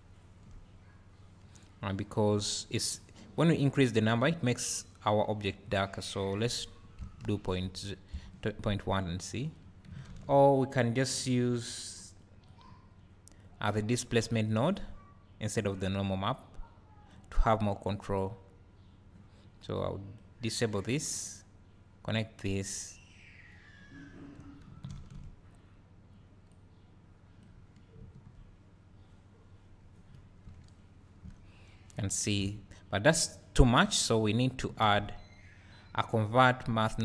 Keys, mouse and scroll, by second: 0.7 scroll up 1, 1.1 scroll down 1, 1.5 `, 4.0-9.0 drag, 14.3 click, 17.1-17.9 drag, 19.8-34.2 drag, 30.6 `, 31.5-32.0 scroll up 2, 32.0 `.